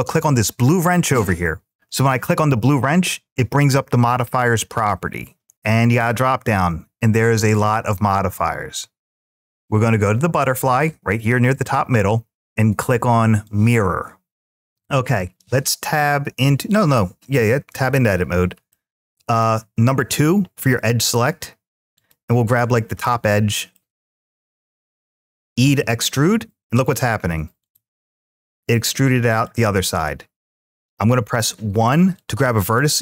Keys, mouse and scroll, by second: 1.7 click, 5.8-13.5 drag, 17.5 Tab, 18.5 middle click, 20.2 2, 20.5 2, 21.7 click, 22.8 middle click, 24.5 click, 25.4 e, 27.4 click, 27.9-29.4 middle drag, 31.4 1, 31.9 click.